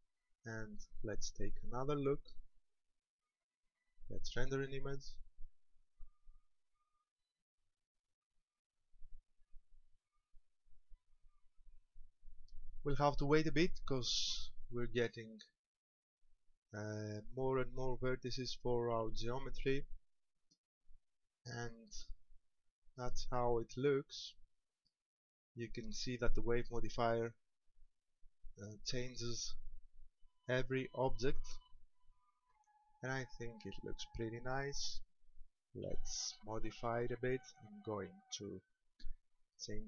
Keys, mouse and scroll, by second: 2.2 click, 4.4 click, 35.9 Escape, 37.7 scroll down 2, 38.3 middle click, 39.4 scroll down 4.